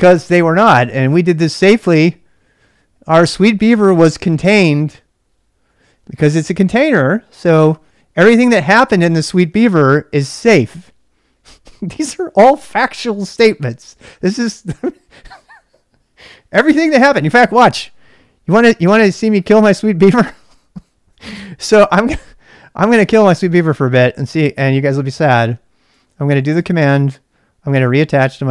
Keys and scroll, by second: 19.9-20.7 typing, 26.0-26.5 typing, 28.3 ctrl+[, 28.4-28.5 typing.